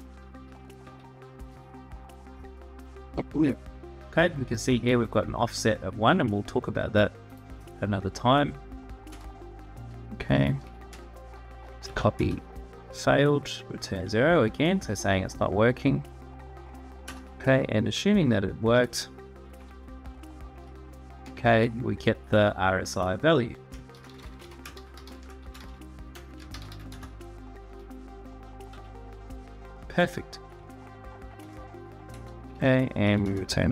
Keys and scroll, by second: 0.6 Tab, 8.8 Return, 10.3 /, 10.7 space, 11.6 Tab, 11.9 Return, 13.8 Tab, 16.8 Return, 19.2 /, 21.0 space, 23.5-26.9 typing, 28.4 Tab, 31.1 ctrl+s, 31.9 Return, 32.8 Tab, 33.0 Return.